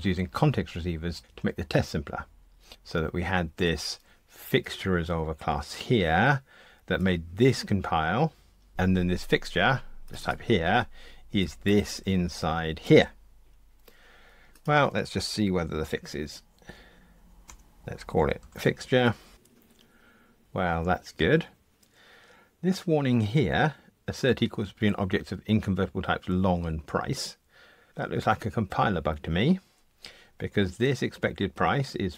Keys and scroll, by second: 15.8 alt+Return.